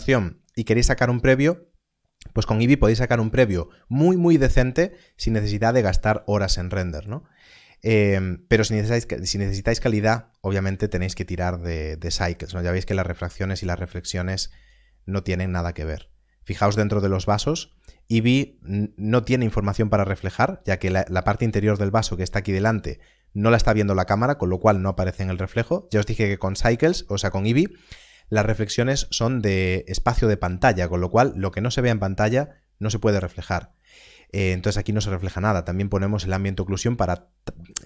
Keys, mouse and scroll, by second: 8.1 click, 14.5 click.